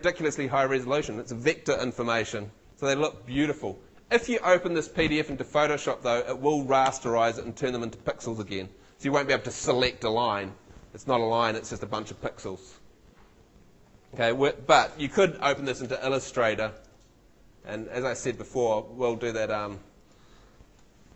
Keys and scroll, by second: 15.8 shift+super+w.